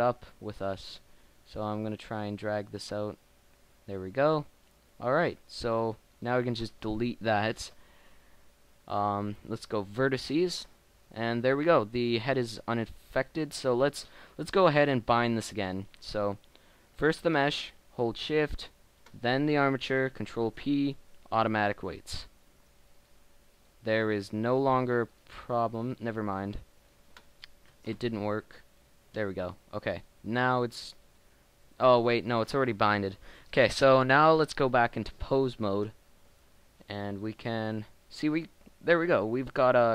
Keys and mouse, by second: 8.2 Delete, 11.3 Tab, 15.2 right click, 20.5 ctrl+p, 27.8 ctrl+p, 36.8 ctrl+Tab, 38.1 r.